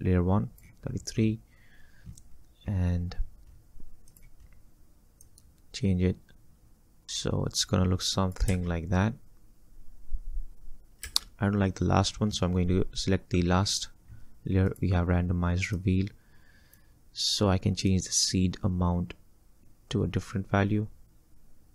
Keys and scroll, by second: 6.5 space, 8.6 space, 11.1 space.